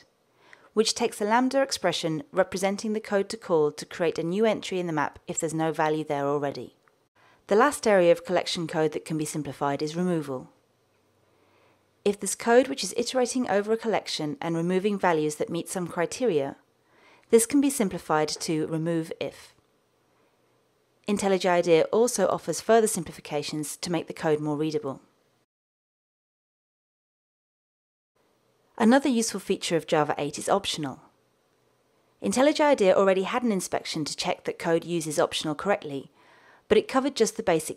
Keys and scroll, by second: 18.1 alt+Return, 22.4 alt+Return.